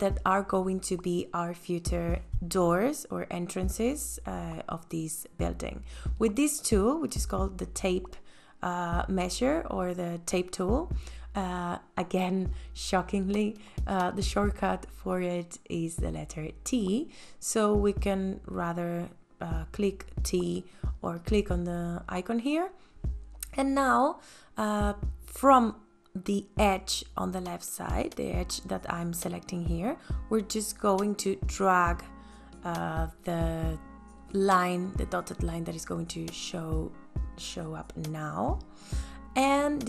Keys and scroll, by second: 21.9 space, 23.2 t.